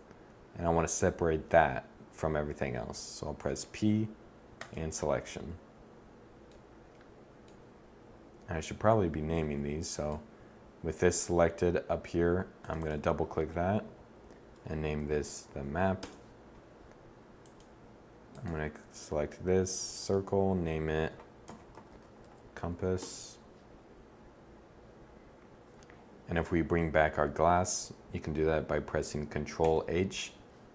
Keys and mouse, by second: 3.0 p, 9.0 Tab, 17.9-22.6 drag, 29.2 ctrl+h.